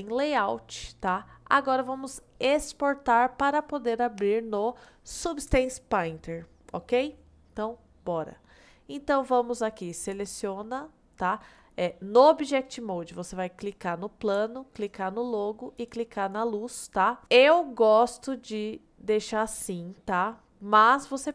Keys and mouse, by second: 0.8-1.8 middle drag, 8.5-9.4 middle drag, 13.7-14.4 drag, 14.8 shift+click, 15.8 shift+click, 17.2-18.1 middle drag, 18.6-20.7 middle drag.